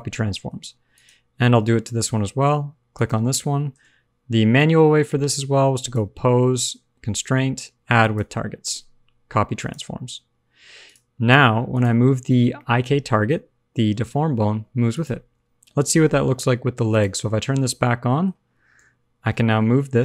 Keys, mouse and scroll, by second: 0.2 shift+middle click, 0.5-0.9 scroll up 1, 0.9 click, 2.9 shift+click, 5.7 click, 10.0-10.6 scroll down 1, 10.6 scroll down 2, 10.8 click, 11.3 shift+middle click, 11.3-11.6 shift+scroll down 1, 11.6 click, 12.3 shift+middle click, 12.3 scroll down 1, 12.5 middle click, 13.2 g, 15.3 alt+r, 15.4 alt+g, 16.9 click, 17.3 scroll down 2, 17.4 middle click, 18.7 KP_3, 19.1 scroll down 1, 19.3 shift+middle click, 19.5-19.8 scroll up 1.